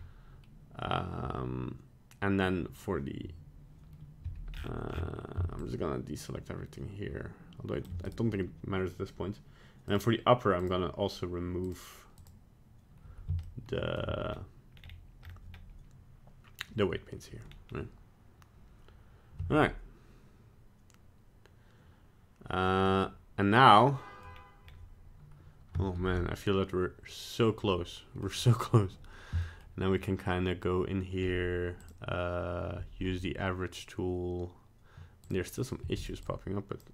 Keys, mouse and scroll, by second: 4.2 c, 9.9 click, 10.6 click, 11.6 click, 12.2 click, 13.4 shift+middle click, 14.3 scroll up 1, 14.7 scroll down 3, 15.2-15.6 scroll up 3, 17.5-19.5 scroll down 2, 19.5 Tab, 22.6 scroll up 1, 22.9 middle click, 24.3-24.6 scroll down 1, 24.6-25.0 scroll up 1, 26.8 ctrl+s, 27.7 middle click, 28.2 middle click, 29.4 middle click, 31.8 click, 35.2 click, 35.8 f, 36.2 click.